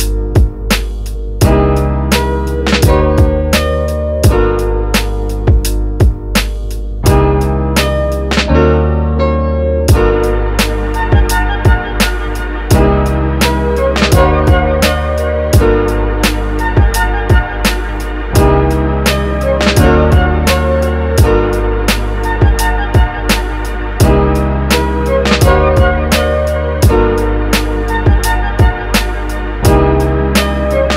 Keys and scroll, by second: 20.0 super+z, 25.3 super+z, 27.2 x.